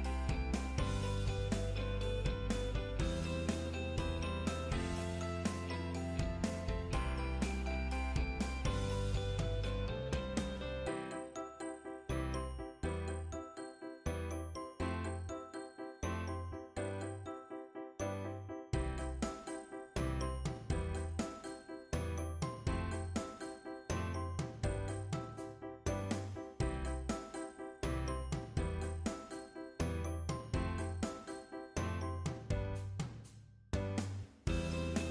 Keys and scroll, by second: 25.4 scroll down 1, 25.7-26.2 scroll up 1.